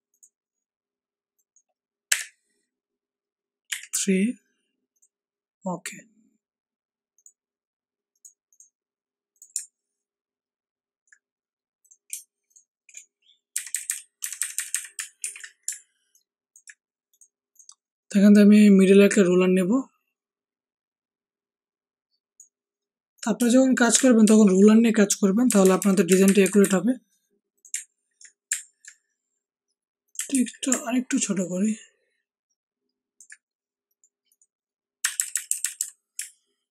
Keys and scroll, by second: 2.1 Up, 3.6 3, 13.5 Down, 13.7 Down, 13.8 Down, 14.2 Down, 14.3 Down, 14.5 Down, 15.2 Down, 24.2 ctrl+shift+g, 25.4 Down, 25.6 Down, 25.7 Down, 26.0 Up, 26.2 Up, 26.6 Up, 30.3 ctrl+t, 35.0 Down, 35.1 Down, 35.3 Down, 35.4 Down, 35.6 Down, 35.7 Down.